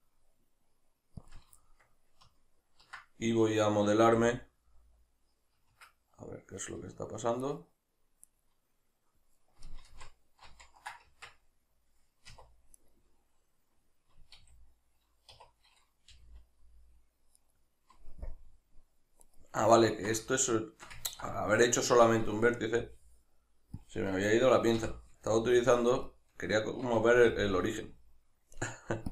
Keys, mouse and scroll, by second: 1.3 click, 1.6-7.4 shift+middle drag, 4.2 e, 6.7 \, 7.4 right click, 8.3 right click, 9.9 ctrl+z, 11.1 Tab, 12.3 1, 12.7 right click, 14.3 a, 17.5 right click, 18.3 KP_Decimal, 19.2 right click, 19.9-23.9 ctrl+middle drag, 22.8 g, 23.9 click, 24.8 o, 25.5-27.3 shift+middle drag, 27.3 g.